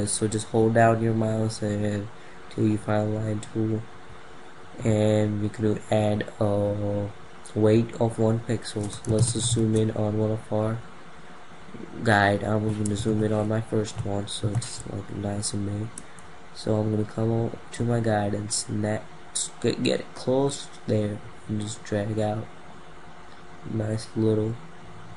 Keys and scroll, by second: 8.7 ctrl+=.